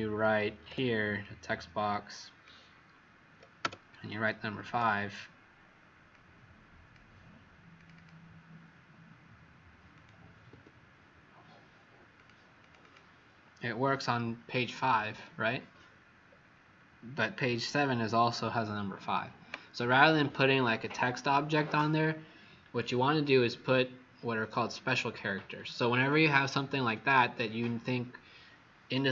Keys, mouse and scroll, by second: 0.6 t, 1.1 click, 3.6 5, 4.5 Escape, 6.1 click, 7.9 click, 9.9 click, 10.4 Escape, 12.1 click, 12.5 click, 12.7 click, 16.2-19.0 scroll down 8.